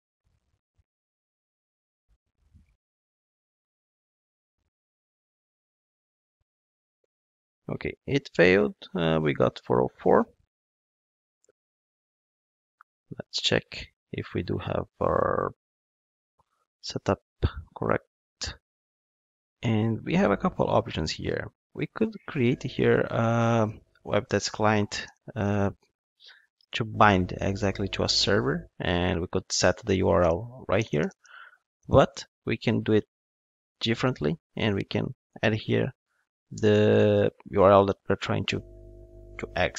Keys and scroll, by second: 24.1 Return, 30.2 alt+BackSpace, 36.5 Return.